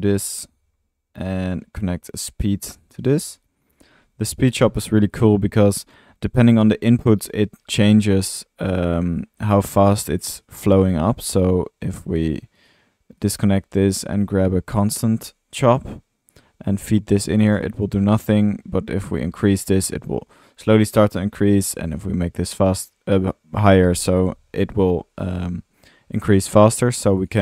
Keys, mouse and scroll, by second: 0.0-0.4 typing, 1.2-1.6 drag, 2.9 Tab, 2.9-4.2 typing, 5.8 click, 9.2 drag, 10.0-10.3 drag, 10.6 click, 10.9 click, 11.8 Escape, 12.6 right drag, 13.6-15.2 typing, 26.9 drag.